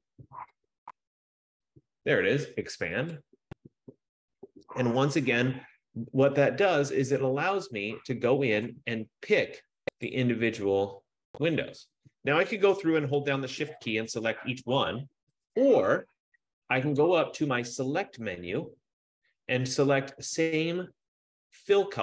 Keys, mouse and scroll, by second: 1.0 click, 3.5 click, 8.3 click, 8.9 click, 10.2 click, 14.2 shift+click, 18.3 click.